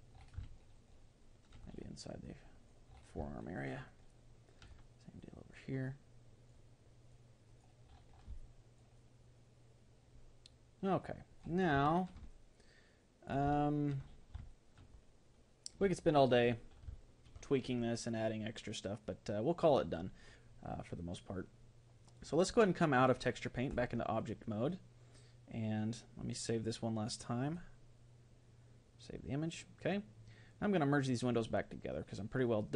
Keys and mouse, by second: 0.4-6.8 middle drag, 2.3-4.0 drag, 5.2-9.2 drag, 8.4-19.0 middle drag, 19.0-20.8 drag, 22.4-24.4 drag, 26.4-28.7 drag.